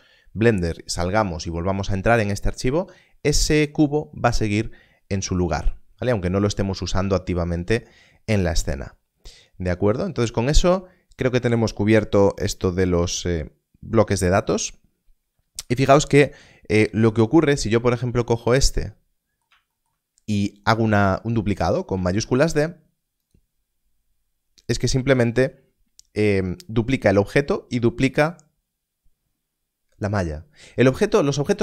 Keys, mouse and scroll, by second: 15.2 click, 15.4 scroll down 1, 16.8-17.5 scroll up 1, 17.5 click, 22.1 shift+d, 23.2 click.